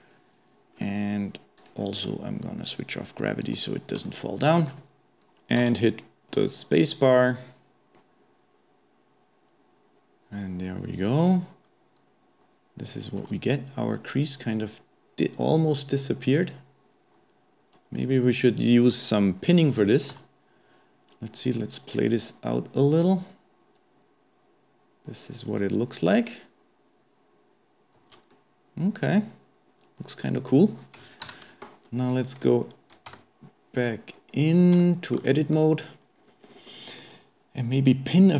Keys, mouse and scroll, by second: 0.7-1.6 scroll down 2, 1.6 click, 2.0-2.7 scroll down 4, 2.7-4.1 drag, 4.1-5.1 shift+middle drag, 5.6 space, 13.3 space, 13.5-16.7 middle drag, 20.1 space, 22.0-25.1 middle drag, 28.3 space, 28.3-31.3 middle drag, 31.3 shift+Left, 31.9-34.1 scroll up 2, 34.1-34.5 scroll down 3, 34.5-34.8 scroll up 1, 34.8 Tab, 35.3 shift+middle click, 36.2-36.5 scroll down 2, 36.5-37.1 scroll up 1, 37.1-38.3 middle drag.